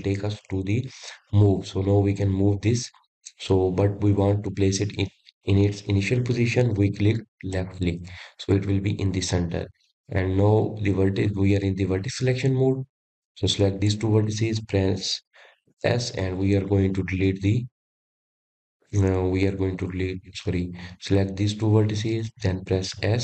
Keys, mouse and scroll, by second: 13.9 click, 17.5 click, 19.8 x.